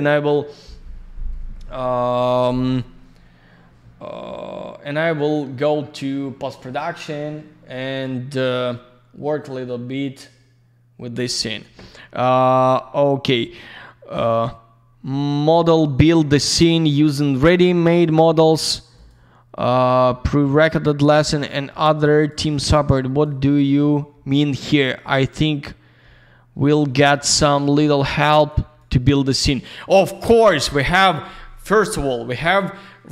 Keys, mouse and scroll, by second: 9.9 scroll up 1, 17.0 click, 17.7 click, 17.8 click, 18.0 click, 18.9 click, 19.0 click, 20.4 click, 21.2 click, 21.2 click, 21.5 click, 22.4 click, 22.5 click, 22.7 click, 23.4 click, 23.5 click, 23.9 click, 24.5 click, 24.6 click, 25.0 click, 27.0 click, 27.1 click, 27.5 click, 28.3 click, 28.4 click, 28.7 click.